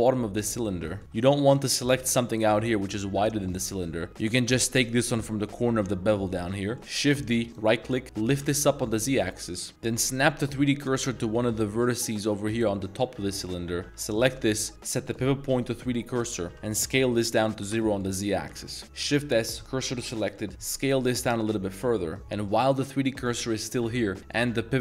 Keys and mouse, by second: 0.8 shift+middle click, 1.5 alt+z, 1.8 alt+click, 2.2 z, 2.5-2.8 middle drag, 3.1 z, 3.3 middle drag, 5.4 z, 6.5 z, 6.6 middle drag, 6.8 shift+d, 8.1 g, 8.3 z, 9.1 click, 9.4 middle click, 10.0 click, 10.5 shift+s, 11.4 shift+middle drag, 13.3 middle click, 14.1 alt+click, 14.7 click, 15.0-15.9 drag, 16.5 s, 16.8 z, 17.6 0, 18.0 click, 18.3-18.6 middle drag, 19.5 shift+s, 20.0 middle click, 20.7 s, 24.2-24.8 drag.